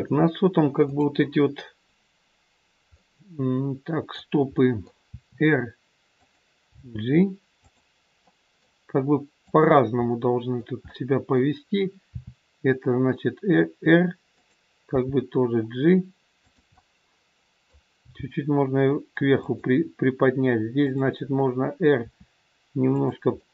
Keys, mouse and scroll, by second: 0.8 click, 2.9 middle click, 5.1 r, 6.7 g, 8.2 middle click, 9.3 click, 10.3 middle click, 12.2 r, 14.8 g, 16.7 middle click, 18.0 g, 20.7 click, 21.9 r, 23.4 middle click.